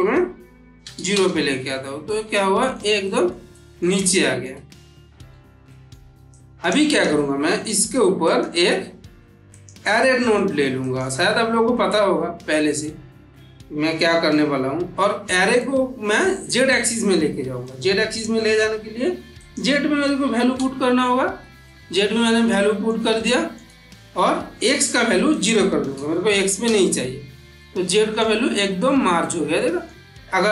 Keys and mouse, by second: 2.0-2.9 middle drag, 6.2-7.1 click, 8.2 click, 9.4 click, 10.7 click, 15.4-16.0 middle drag, 17.5-18.1 drag, 19.3 click, 21.5-22.7 middle drag, 25.2 click, 27.5-28.0 middle drag.